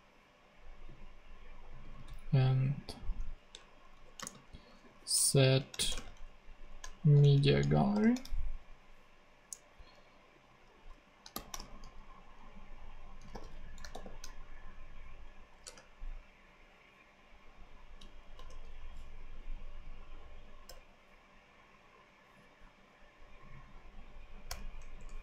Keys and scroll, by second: 3.7 alt+shift+Right, 4.1 alt+shift+space, 4.7 alt+shift+super+space, 4.8 super+v, 5.2 alt+super+Left, 5.8 alt+shift+BackSpace, 6.1 alt+shift+Right, 6.8 alt+shift+Left, 7.2 shift+Right, 7.9 shift+super+u, 11.0-14.3 typing, 15.6 Return, 18.3 [, 20.6 ], 24.4 [, 24.9 BackSpace.